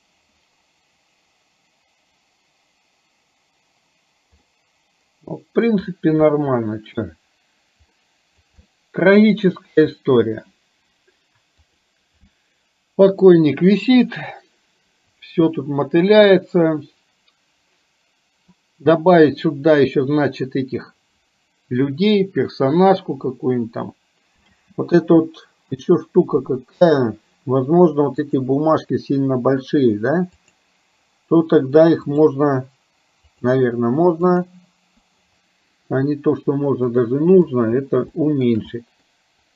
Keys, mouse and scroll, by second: 4.6-5.7 middle drag, 6.4 shift+middle click, 8.0 middle click, 8.9-10.0 shift+middle drag, 11.7 click, 24.5 space, 30.4 click, 34.5 click, 37.1 click, 38.2 shift+middle click, 38.7 middle click.